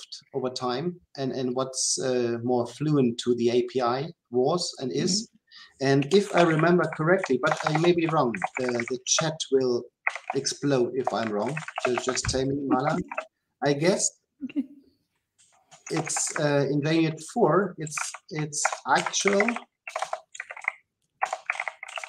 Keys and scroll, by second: 16.0 Delete.